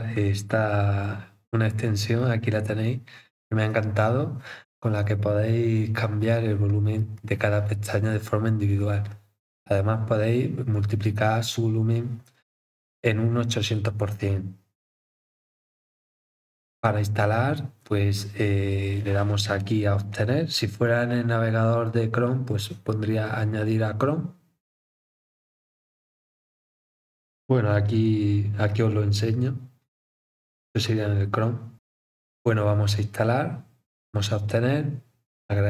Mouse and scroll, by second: 0.1 click, 2.1 scroll down 4, 14.1 scroll up 1, 15.2 scroll up 2, 16.9 scroll up 4, 17.7-18.2 scroll down 8, 33.1 click.